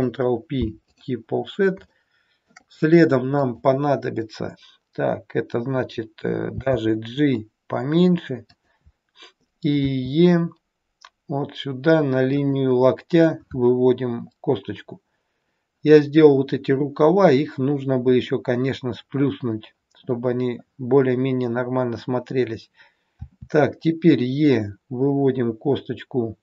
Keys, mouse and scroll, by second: 1.6 scroll down 2, 1.9 shift+middle click, 3.3 click.